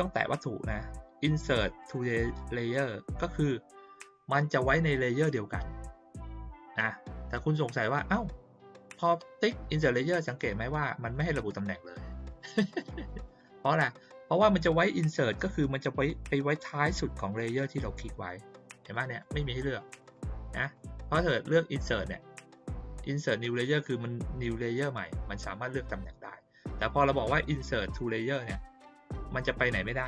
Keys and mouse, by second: 1.8 click, 10.5 click, 10.7 click, 11.0 click, 11.2 click, 11.5 click, 11.8 click, 12.1 click, 12.2 click, 12.5 click, 12.7 click, 12.9 click, 13.1 click, 13.3 click, 18.9 click, 19.2 click, 19.3 click, 19.5 click, 19.7 click, 19.9 click, 20.1 click, 20.3 click, 20.5 click, 20.7 click, 21.7 click, 27.5 click.